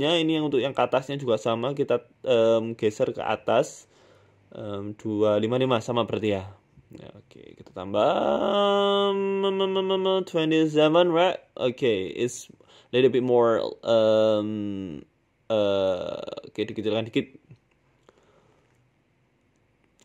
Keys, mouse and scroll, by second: 3.2 click, 4.8 KP_5, 5.7-6.0 scroll down 11, 6.7 click, 6.7 scroll down 2, 6.9-10.9 click, 7.0 click, 7.1 click, 7.3 click, 7.5 click, 10.9 scroll down 6, 11.0 scroll up 1, 11.3 middle click, 12.2 s, 13.1 KP_7, 13.8 r, 15.8 middle click, 16.2-16.6 scroll up 6, 17.7 middle click, 17.7 scroll up 1, 18.3 middle click, 18.7 scroll up 1, 18.9 scroll down 1, 19.0 shift+middle click, 19.1 shift+middle click, 19.7 click.